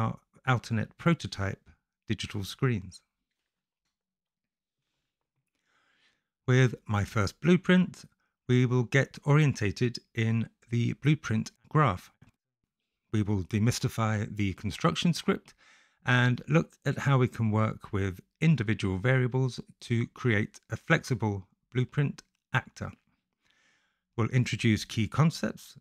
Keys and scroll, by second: 0.0 a, 22.2 Return, 22.5-23.6 typing, 24.9 a, 25.6 /.